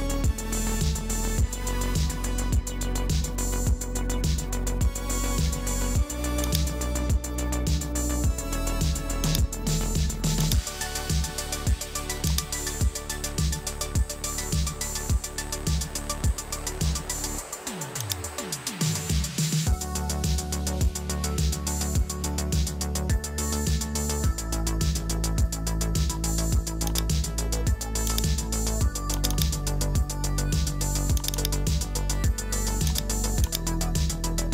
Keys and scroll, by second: 0.7 Return, 2.5 super+a, 4.5 super+j, 7.3 BackSpace, 15.9 super+t, 22.0 Return.